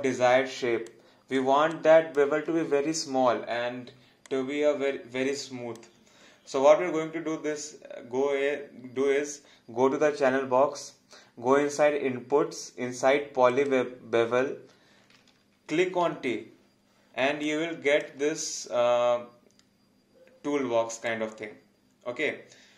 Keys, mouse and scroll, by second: 1.5 alt+click, 4.3 alt+click, 13.5 click, 16.1 t, 17.5 alt+click, 21.1 click.